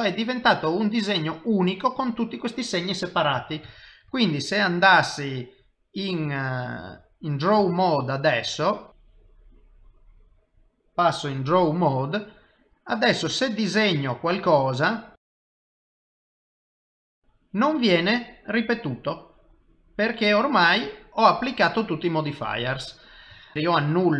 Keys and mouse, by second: 3.9 ctrl+Tab, 6.4 middle click, 8.0 ctrl+Tab, 8.9 ctrl+Tab, 8.9 click, 13.0 middle click, 16.3 click, 17.9 middle click, 23.5 ctrl+z.